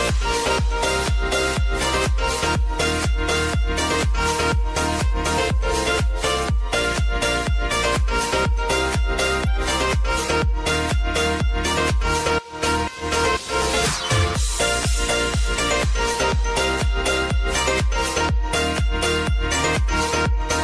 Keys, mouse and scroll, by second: 0.8 ctrl+shift+c, 1.9 Return, 3.6 click, 8.4 Return, 10.8 click, 13.3 Return, 16.9 click, 19.1 click.